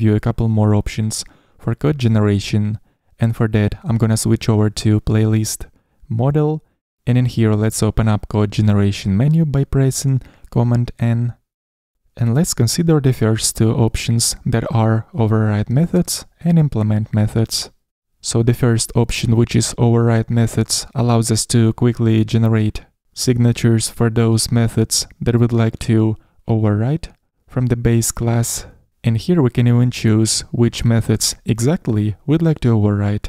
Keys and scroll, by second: 4.6 super+o, 4.6 ctrl+n, 12.0 super+n.